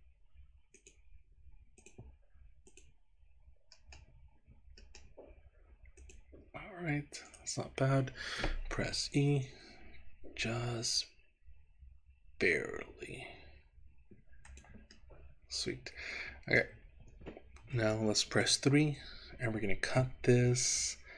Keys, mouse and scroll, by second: 0.1-0.8 scroll up 2, 0.8 click, 1.8 click, 3.8 middle click, 4.8 middle click, 6.0 click, 7.4 right click, 8.9 e, 14.6 click, 15.1-16.6 middle drag, 18.4 KP_3.